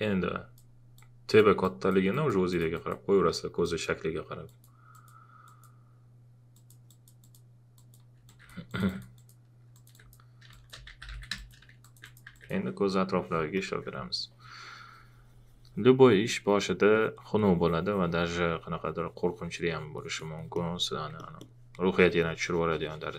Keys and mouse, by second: 8.7 alt+click, 10.6-11.6 typing, 11.7 click, 12.3 alt+click, 13.5 alt+click, 21.1 alt+click.